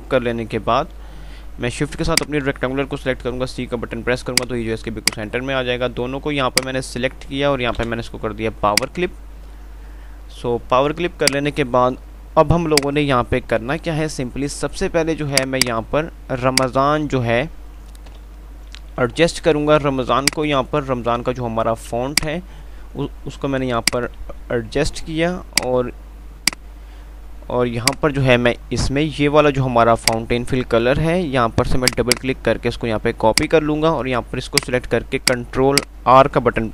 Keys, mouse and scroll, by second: 2.4 shift+click, 3.0 c, 4.3 click, 5.1-8.0 alt+drag, 8.0 alt+c, 9.0 click, 11.5 click, 12.4 F2, 12.9 click, 13.2 F2, 15.6 click, 18.5 Page_Up, 20.1 typing, 20.5-24.1 shift+drag, 24.5 c, 25.6 click, 26.1 F2, 28.1 click, 28.4 F3, 29.9 click.